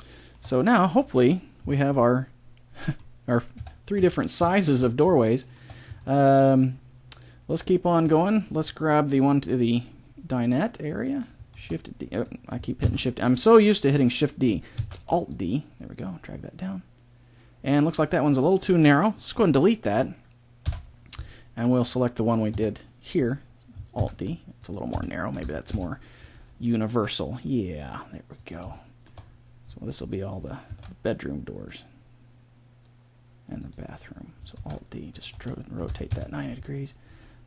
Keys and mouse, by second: 3.5 KP_7, 4.0 z, 4.6-6.8 middle drag, 7.2 middle click, 8.6-10.4 right drag, 11.6 shift+d, 12.8 ctrl+z, 14.8 alt+d, 19.3 Delete, 22.5 KP_7, 24.0 alt+d, 24.9 r, 26.4 g, 28.8 middle click, 30.7 alt+d, 34.6 alt+d, 35.4 r, 37.1 g.